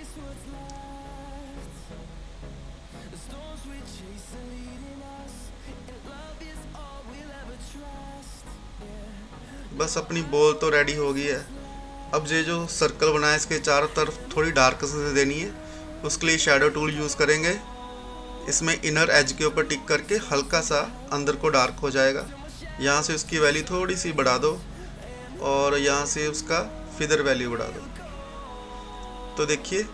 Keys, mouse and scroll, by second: 5.1 scroll down 1, 6.6-8.7 drag, 6.9 typing, 15.1 click, 22.7-29.7 drag.